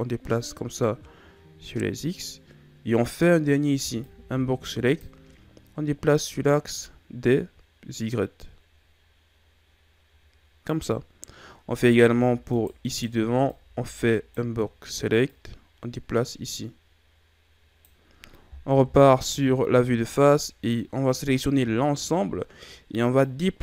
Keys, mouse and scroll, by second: 3.0 right click, 3.6 b, 6.0 click, 11.5 b, 12.8 right click, 13.2 b, 15.2 click, 18.6 KP_1, 19.3 z, 21.0 a, 21.5 a, 23.1 click.